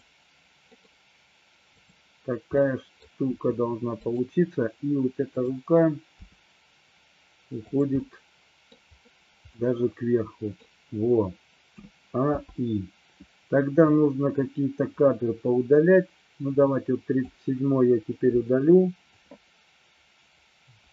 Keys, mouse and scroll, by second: 0.8 middle click, 2.6-3.1 middle drag, 3.4 r, 4.1 click, 5.5 click, 6.3 g, 7.8 click, 8.1-8.9 middle drag, 9.8 scroll up 1, 9.9-10.6 middle drag, 11.8 a, 12.5 i, 14.0 click, 16.6-17.4 drag, 18.4 Delete, 19.1-20.9 drag.